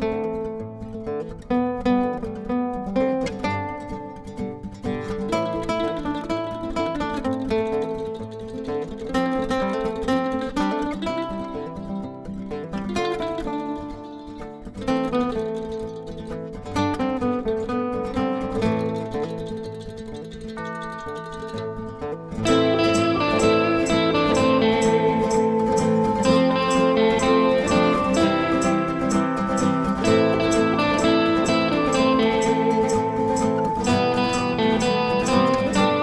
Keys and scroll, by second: 2.6 typing, 5.3 Delete, 7.0 +, 7.8 b, 18.0 -, 18.9 +, 20.9 b, 27.3 ctrl+d, 35.7 Page_Down.